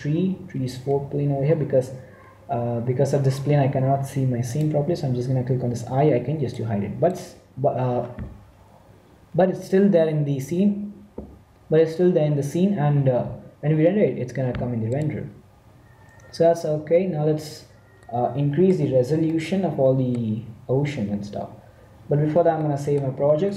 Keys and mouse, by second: 0.7-3.2 middle drag, 4.4-6.3 drag, 6.4-8.3 drag, 14.8-16.7 drag, 18.7-23.5 middle drag.